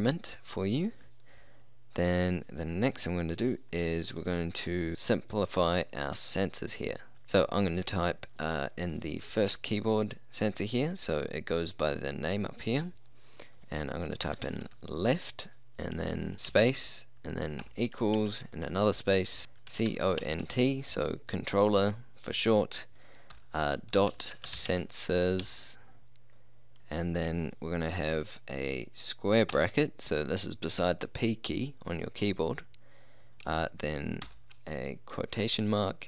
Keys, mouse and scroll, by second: 6.2 middle click, 7.1 space, 7.1 BackSpace, 10.6-14.5 drag, 14.3 l, 14.5 e, 14.5 f, 14.7 t, 16.5 space, 18.2 space, 18.2 =, 19.4-20.6 typing, 23.4-25.5 typing, 29.6 [, 34.3 shift+'.